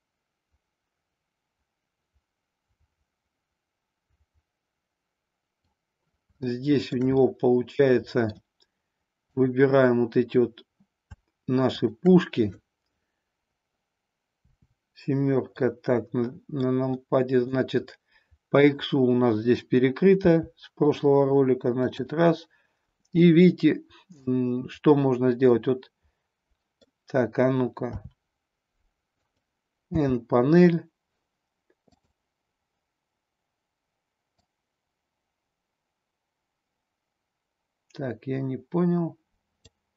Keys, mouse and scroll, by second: 6.4-6.8 shift+middle drag, 7.3-8.3 middle drag, 9.3-10.4 drag, 11.7 shift+click, 14.3 KP_7, 15.6-16.5 middle drag, 17.1 middle click, 17.8-18.7 middle drag, 20.1 r, 21.9 click, 24.2-26.8 middle drag, 27.9 r, 29.3 click, 29.8 n, 31.9 click, 34.4-39.7 drag.